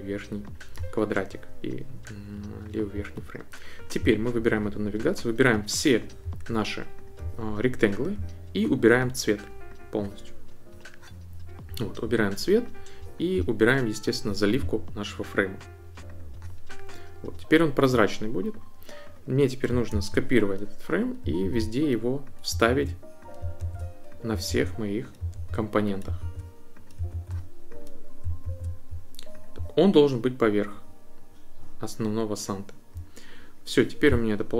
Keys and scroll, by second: 19.9 super+c, 21.4 super+v, 22.6 super+v, 23.6 super+v, 24.5 super+v, 25.3 super+v, 26.2 super+v, 27.1 super+v, 28.5 super+v.